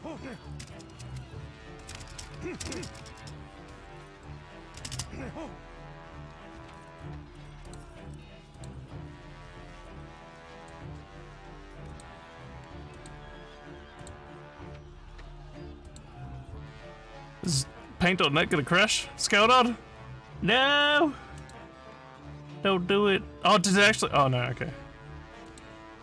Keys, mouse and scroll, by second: 0.0-0.7 typing, 1.9 space, 2.1 space, 3.1-7.1 typing, 7.7 click, 8.6 click, 10.6 click, 11.9 click, 13.0 click, 14.0 click, 15.9 click, 21.4 click, 23.9 click, 25.5 click.